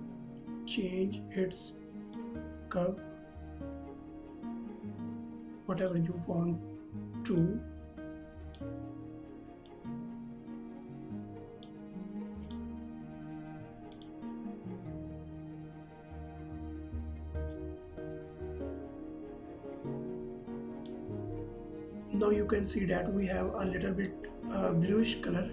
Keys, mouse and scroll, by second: 2.4 click, 17.7 click.